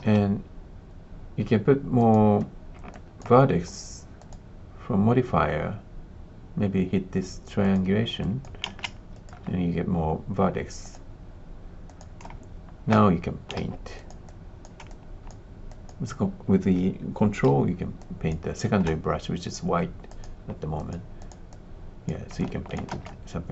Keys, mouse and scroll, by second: 1.9 click, 2.9 alt+click, 4.2 click, 7.7 click, 8.2 alt+click, 8.7 alt+shift+z, 9.1 alt+click, 10.8 click, 11.8 click, 12.3 ctrl+space, 13.5 f, 14.2 click, 20.2-21.2 drag, 21.4 click, 22.3 alt+click, 23.0 ctrl+space.